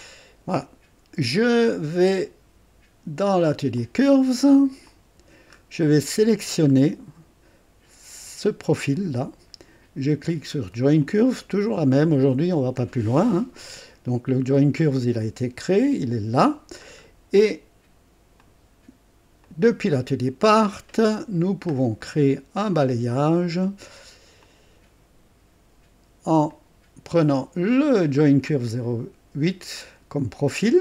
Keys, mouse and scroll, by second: 0.0-1.4 drag, 1.6 right click, 3.8 click, 4.9 click, 5.5-5.9 scroll up 2, 6.1 right click, 6.7 scroll up 1, 8.9 click, 11.0 click, 12.2-12.8 scroll down 2, 16.8-17.1 scroll down 2, 18.4 click, 19.6 click, 21.4-21.8 scroll down 2, 22.0 right click, 22.6 right click, 24.4 click, 26.5 click, 28.2 click, 30.3 click.